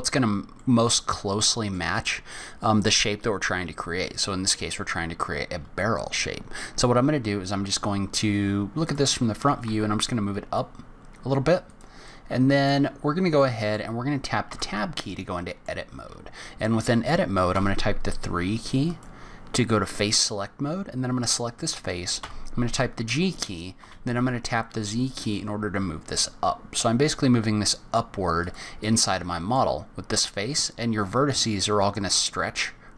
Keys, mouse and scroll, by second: 0.5 middle click, 8.8 click, 9.5 g, 12.0 middle click, 13.4 middle click, 13.8-15.1 scroll up 5, 14.5 Tab, 15.1 middle click, 17.5 3, 18.9 click, 22.2 g, 28.8 middle click.